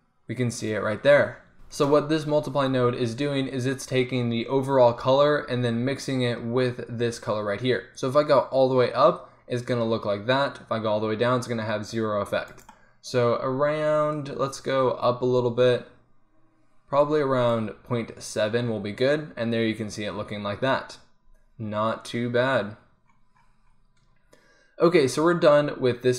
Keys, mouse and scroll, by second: 14.4-15.4 drag, 15.4 middle click, 16.0 click, 21.0-23.0 middle drag.